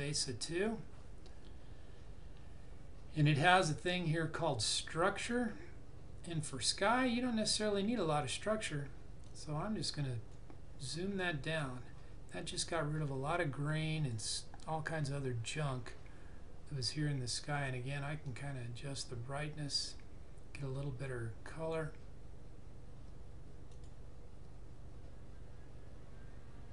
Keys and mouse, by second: 9.2 click, 18.2 click.